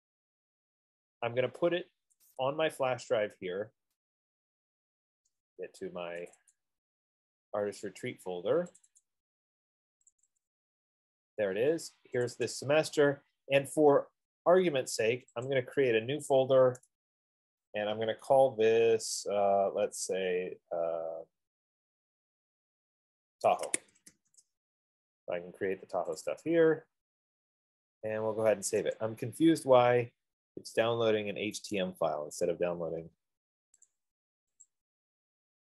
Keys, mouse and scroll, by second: 2.8 click, 5.3 middle click, 6.1 F15, 6.9 click, 9.2 click, 9.4 click, 10.5 click, 10.7 click, 12.7 click, 12.8 click, 15.9 click, 20.2 click, 23.7-26.3 drag, 23.8-24.5 typing, 24.5 Return, 26.3 typing, 26.9 click, 29.4 click, 32.1 right click, 34.1 click, 35.1 click.